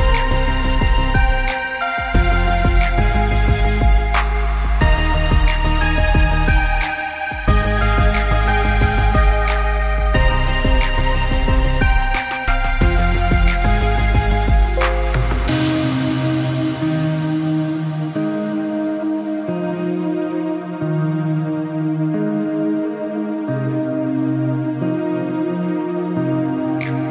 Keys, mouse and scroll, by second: 1.9 click, 9.5 alt+scroll up 1, 9.9 click, 11.2 Delete, 11.7 click, 16.3-16.9 scroll down 1, 16.9-18.0 scroll up 1, 19.4-21.2 scroll down 1, 21.2-21.7 scroll up 1, 22.8-23.4 scroll down 1, 24.6 click, 25.8 i, 26.1 click.